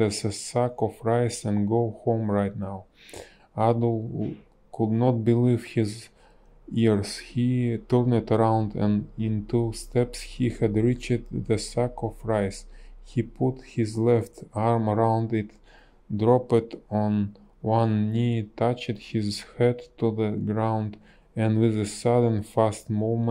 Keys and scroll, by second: 0.5 ctrl+z, 21.8 b.